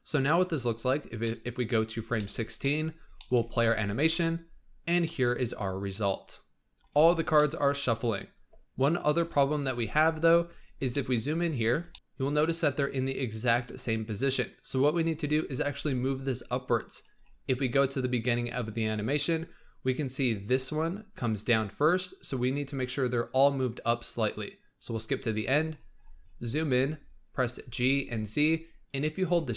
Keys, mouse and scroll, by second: 0.4-0.9 drag, 0.9 scroll down 2, 1.1-1.8 middle drag, 1.8 scroll down 3, 2.1-2.8 shift+middle drag, 2.8 scroll up 1, 3.1 shift+middle drag, 3.4 space, 5.1-6.9 middle drag, 6.9 space, 7.1 scroll down 2, 7.3-7.9 middle drag, 7.9-9.1 scroll up 2, 9.1 KP_1, 10.0-10.8 scroll up 9, 10.8 shift+middle click, 11.2-11.5 scroll up 8, 11.8 shift+middle drag, 15.7 g, 17.1-18.0 scroll down 4, 18.0 click, 18.6-19.9 scroll down 15, 20.1-23.1 drag, 24.2-25.4 drag, 25.4-26.7 scroll up 24, 27.5 g.